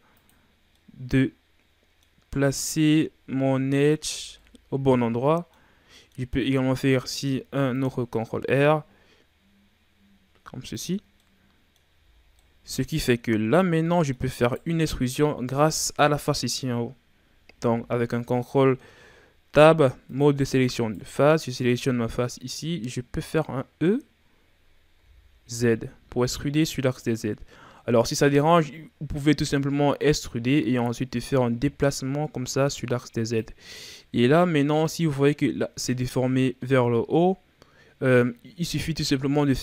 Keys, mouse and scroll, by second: 0.5 scroll down 3, 0.7-2.2 middle drag, 2.2-2.9 scroll up 3, 2.9-3.7 scroll down 3, 3.7 middle click, 4.0 a, 4.4-6.9 middle drag, 6.9 ctrl+r, 11.0 scroll down 1, 11.2 middle click, 11.9 a, 12.2 scroll down 3, 12.4 middle click, 13.2-13.8 scroll up 3, 13.8 middle click, 14.4 right click, 20.7 right click, 21.4-22.5 middle drag, 22.5-24.9 scroll up 3, 24.9 e, 31.3-33.7 drag, 33.7 scroll down 3, 34.0-35.5 middle drag, 35.5-36.8 scroll up 2, 36.8 scroll up 1, 36.9-39.6 middle drag.